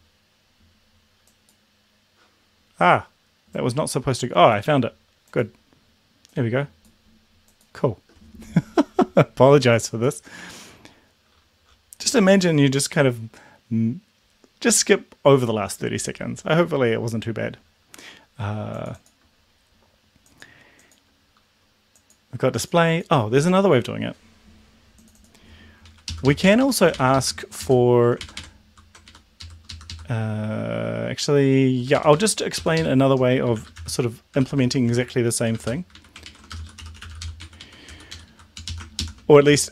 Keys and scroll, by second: 26.1 Left, 26.3 Left, 26.4 Right, 26.6 Right, 27.2 Left, 28.2 ctrl+shift+Right, 29.1 shift+Right, 29.4 shift+Left, 29.9 Left, 32.0 ctrl+shift+Right, 32.6 ctrl+shift+Left, 33.3-37.8 typing, 36.0 Right, 37.9 ctrl+Down, 38.1 Up, 38.2 Left, 38.6 Down, 38.7 Left, 39.5-39.7 typing.